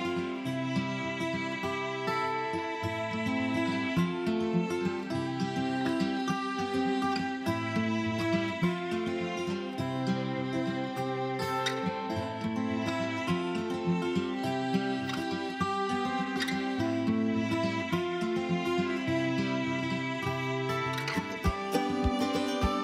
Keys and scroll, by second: 15.6 alt+Delete.